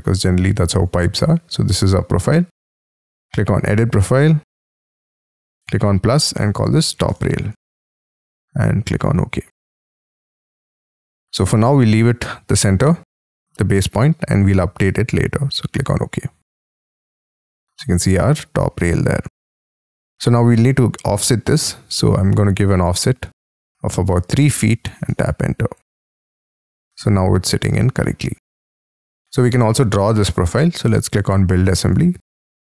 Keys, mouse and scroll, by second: 1.2 double click, 6.3-8.1 typing, 14.8-19.3 scroll down 4, 19.3 Escape, 24.1 3, 24.4 ', 25.0 Tab, 27.7-28.6 scroll down 19, 28.6 Escape, 28.9 middle click, 29.4-30.1 scroll down 15, 30.1 middle click.